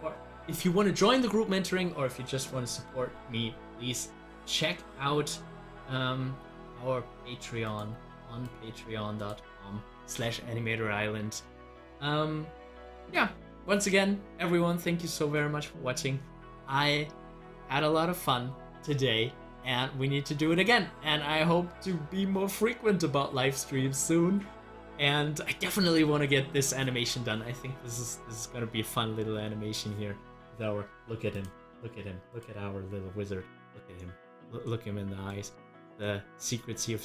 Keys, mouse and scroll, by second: 31.8 click, 34.1 scroll up 1, 34.7 middle click, 35.6 scroll up 1, 36.0 middle click, 36.6 scroll up 1.